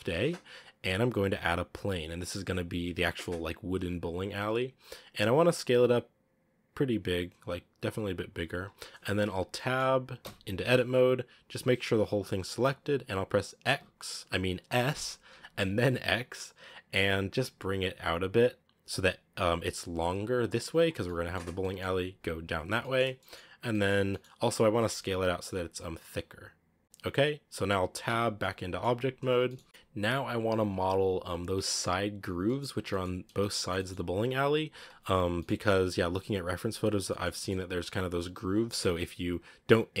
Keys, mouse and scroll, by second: 2.1 shift+a, 4.3 scroll up 1, 4.3-5.2 scroll down 7, 5.2 s, 8.4 s, 9.4 middle click, 10.1 Tab, 11.5 a, 11.6 a, 13.6 s, 14.7 s, 20.9-22.5 middle drag, 22.5 scroll down 1, 22.7 middle click, 22.9-23.6 scroll up 4, 23.0 middle click, 23.6 middle click, 24.1-24.6 scroll down 4, 24.6 s, 27.9 Tab, 28.3-32.0 middle drag, 32.0-32.3 scroll up 3, 32.3-35.1 middle drag, 35.1 scroll up 1, 35.3-37.4 shift+middle drag, 37.4-38.1 scroll up 2, 38.1-40.0 scroll up 1.